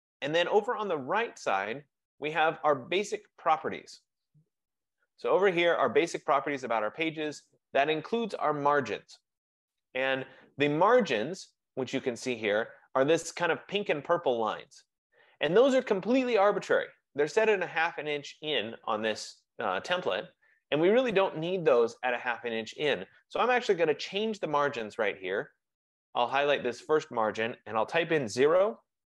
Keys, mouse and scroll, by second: 26.4 click, 27.9 0.